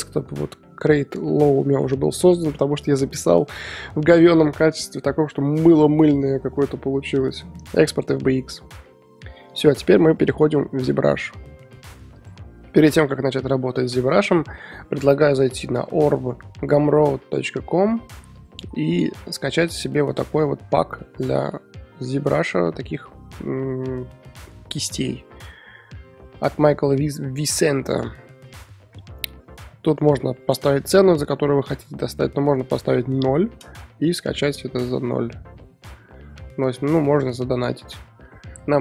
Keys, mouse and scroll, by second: 9.5 Left.